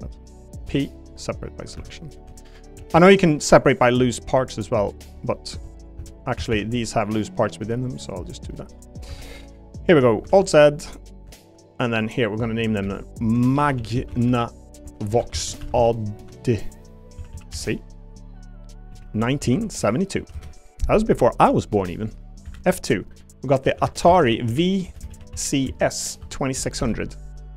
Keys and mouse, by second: 0.6 p, 1.6 Tab, 1.7 Tab, 2.3 shift+middle click, 2.8 a, 2.9 a, 3.2 b, 4.1 p, 5.5 Tab, 5.7 click, 6.0 Tab, 6.4 a, 6.5 a, 6.8 b, 7.6 p, 8.5 shift+right click, 9.1 Tab, 9.3 click, 10.3 alt+z, 10.9 middle click, 11.3 shift+middle click, 11.9 click, 12.8 F2, 17.3 s, 22.0 click, 22.4 F2, 25.0 shift+BackSpace, 26.8 0.